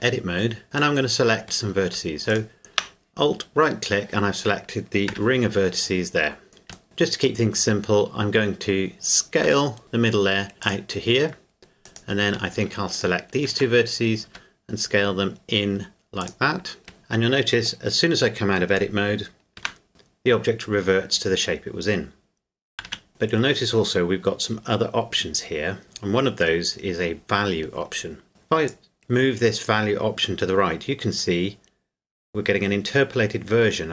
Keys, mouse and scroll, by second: 1.0 middle click, 2.3 alt+right click, 3.4-3.8 scroll up 1, 5.1 z, 6.8 shift+middle click, 8.8-9.2 scroll down 1, 9.4 s, 10.6 click, 11.8 right click, 14.3 s, 16.2 click, 16.8 Tab, 19.6 Tab, 22.8 Tab, 22.9 z, 28.6 click.